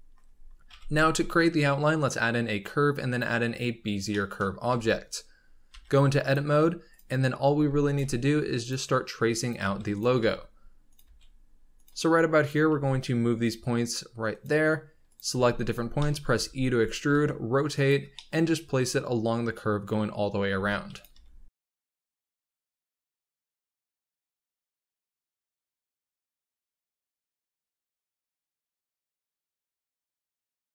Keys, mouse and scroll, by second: 0.6 shift+a, 4.0 shift+middle drag, 4.3-4.6 scroll up 1, 4.6 Tab, 5.6 g, 6.4 scroll up 2, 6.8 click, 7.4 r, 7.9 g, 9.3 click, 9.5 g, 10.1 r, 10.9 g, 12.3 click, 12.6 g, 15.0 click, 15.2 g, 15.9 shift+middle click, 16.3 e, 17.0 r, 18.1-20.2 shift+middle drag, 20.2 scroll up 1, 20.5-30.7 typing, 23.1 shift+middle click, 23.3 scroll down 2, 23.8 scroll up 2, 24.5 click, 25.0 ctrl+z, 25.2 scroll down 1, 25.2 shift+middle click, 27.0 shift+middle click, 27.2 click, 27.8 click, 28.7 click, 29.5 click, 30.0 click.